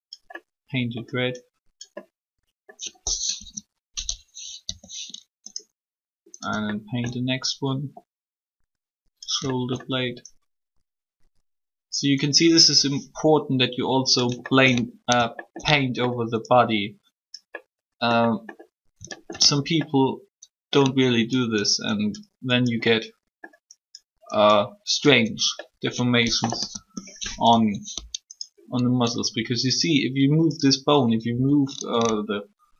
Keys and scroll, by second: 3.2 3, 26.4 3, 31.3 r.